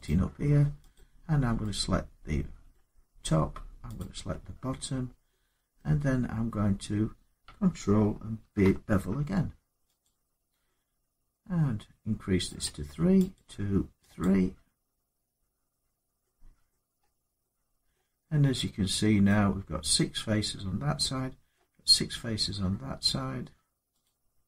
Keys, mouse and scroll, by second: 0.7 click, 2.5 middle click, 3.7 shift+click, 4.6 scroll down 3, 5.5 middle click, 8.2 ctrl+b, 8.2-9.7 scroll up 3, 9.8 click, 12.4 click, 13.1 click, 14.0 click, 16.5 middle click, 16.8 scroll up 4, 17.7 middle click, 19.1 middle click, 21.4 middle click, 23.8 click.